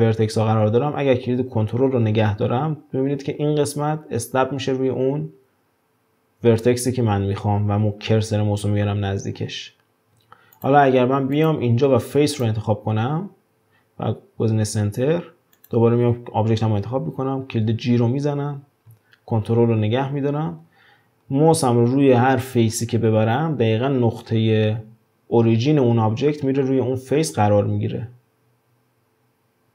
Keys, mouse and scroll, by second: 11.4-14.4 drag, 15.6 click, 17.9 g.